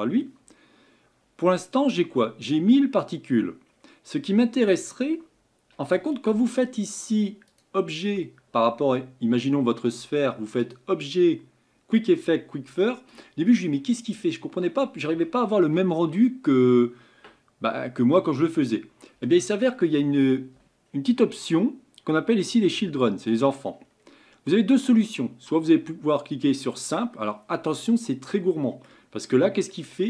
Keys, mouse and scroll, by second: 26.9-28.0 drag, 28.0-29.1 middle drag, 29.1-29.6 scroll up 6, 29.7-30.0 middle drag.